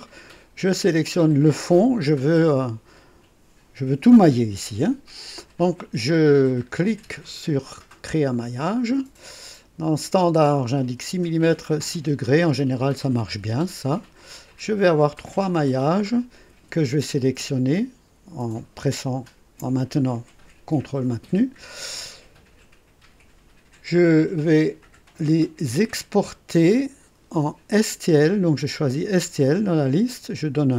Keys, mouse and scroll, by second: 1.4 ctrl+click, 8.3 click, 13.0 click, 14.2-14.5 scroll down 1, 15.4 click, 17.7 ctrl+shift+click, 18.9 ctrl+click, 24.7 click, 26.4 click, 28.2 click, 29.6 click.